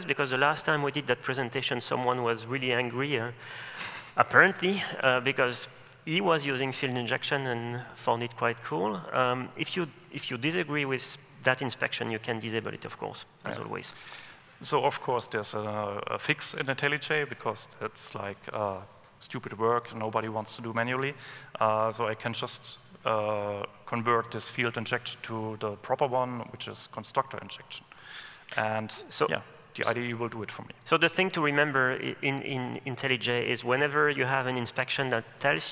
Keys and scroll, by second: 14.2 alt+Return.